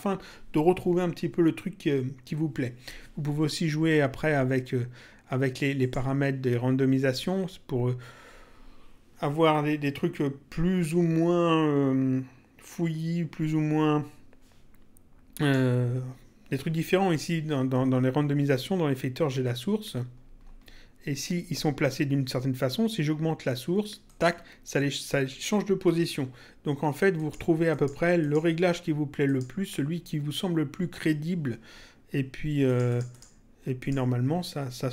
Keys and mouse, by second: 5.7 click, 15.4 click, 24.0 click, 27.1 click, 29.2 click, 32.6 click.